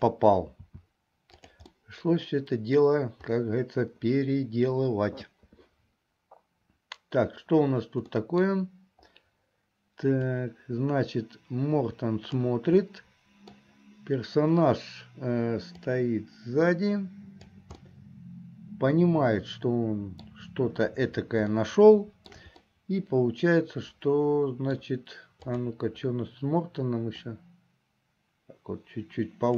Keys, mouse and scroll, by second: 0.7 s, 1.8-2.8 middle drag, 8.2 middle click, 10.4-12.4 drag, 12.9 middle click, 16.0-17.6 drag, 17.8-20.4 middle drag, 21.6 shift+middle click, 22.7-24.9 middle drag, 25.6 click, 27.4-29.5 drag.